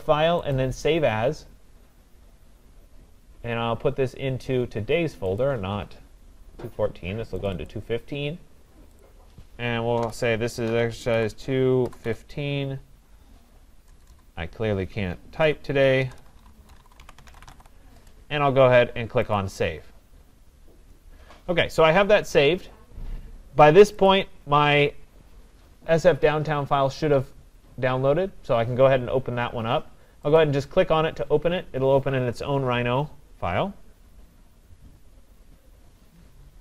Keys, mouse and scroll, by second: 0.2 scroll, 0.6 click, 5.4 click, 6.4 scroll, 7.4 click, 7.7 click, 9.0 click, 10.0-12.6 typing, 13.9 BackSpace, 14.1 BackSpace, 14.2 click, 15.6-18.0 typing, 19.4 click, 24.1 click, 30.4 click, 32.2-35.5 drag.